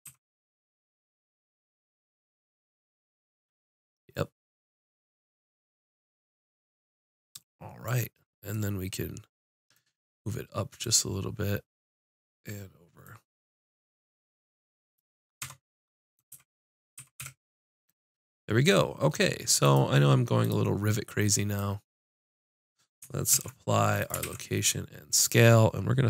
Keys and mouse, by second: 0.0 z, 5.0-6.5 middle drag, 6.5 click, 6.8 middle click, 7.7-8.9 middle drag, 10.8 click, 15.4 Tab, 16.3 z, 17.0 z, 17.2 a, 20.1-21.7 drag, 22.5 click, 23.3 ctrl+a, 24.2 ctrl+a.